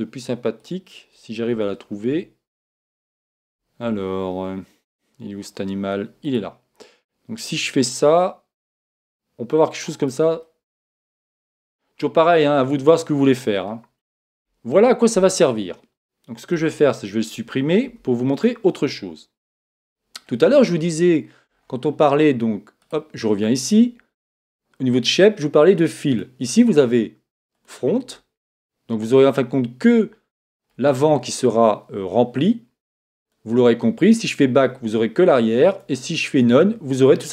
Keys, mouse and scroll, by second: 1.5 Tab, 2.1 Tab, 3.4 a, 3.8 a, 6.2 right click, 7.4 click, 10.4-12.3 middle drag, 14.3-15.8 scroll up 1, 15.8 scroll up 1, 15.9 middle click, 16.5 Tab, 17.8 x, 19.8-24.3 middle drag, 22.8 right click, 24.3-28.0 drag, 28.4-30.2 middle drag, 33.2 click, 35.7 click, 36.9-37.3 middle drag.